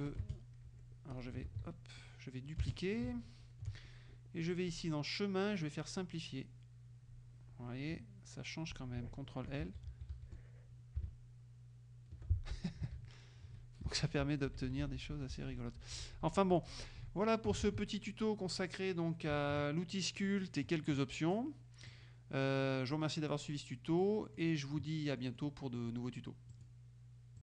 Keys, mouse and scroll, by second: 0.1 click, 0.2 space, 0.8 F1, 1.2 click, 1.5 ctrl+z, 2.1 ctrl+click, 2.5-3.8 ctrl+drag, 2.7 space, 4.8-6.6 drag, 9.7 shift+l, 13.0 ctrl+z, 17.8 ctrl+z, 18.1 ctrl+middle click, 19.4 KP_Subtract, 22.0-23.5 drag, 23.6 middle click, 25.3 middle click, 26.6 click, 27.5 click.